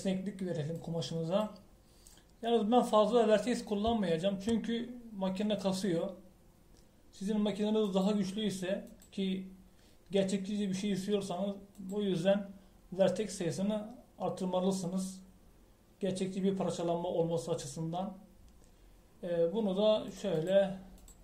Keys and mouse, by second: 1.7 click, 8.8-12.9 drag, 21.0-21.2 drag.